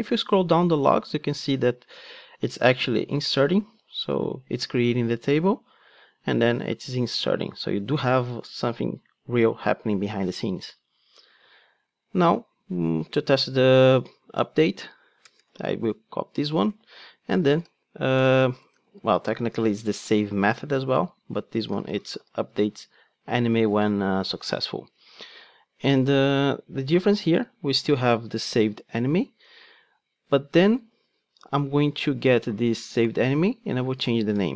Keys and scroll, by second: 13.7 super+c, 16.5 super+v, 34.1 Return.